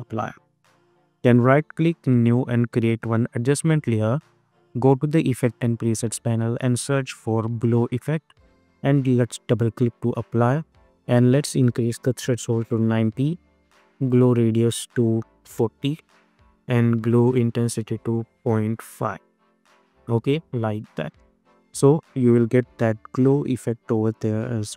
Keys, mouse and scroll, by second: 1.3 right click, 2.1 click, 6.2 click, 6.5 ctrl+a, 7.0-8.4 typing, 9.4 click, 12.6 Return, 13.9 click, 15.9 Return, 17.4 click, 19.3 Return, 20.8 click, 21.2 space.